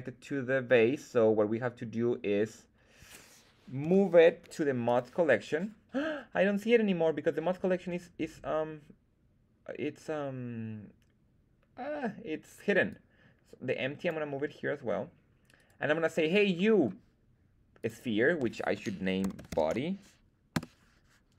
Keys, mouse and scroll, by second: 3.8 m, 12.8-14.0 drag, 15.5 click, 15.5 right click, 16.5 middle drag, 17.7 click, 17.9-21.2 drag.